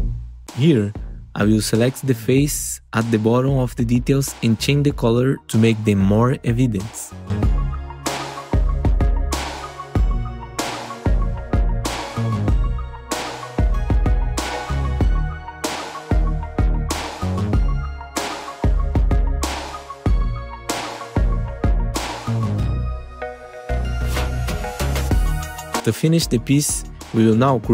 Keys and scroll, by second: 0.5 F4, 1.3 4, 5.5 F4, 7.4 F4, 15.9 F4, 18.3 F4, 18.8 alt+q, 21.6 F4, 22.0 F4, 24.1 F4.